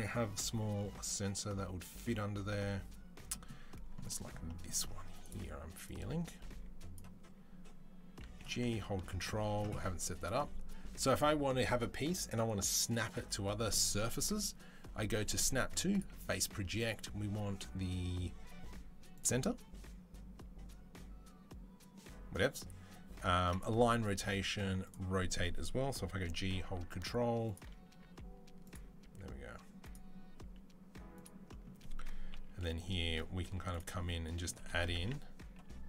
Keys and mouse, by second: 5.8-7.0 drag, 5.8-7.0 middle drag, 8.2 g, 10.0-26.3 drag, 26.1 g, 26.3-27.4 ctrl+right drag, 27.4 middle click, 27.8 s, 28.8 s, 29.1 click, 32.1 KP_3, 33.2 z, 34.4 g, 35.2-35.8 middle drag.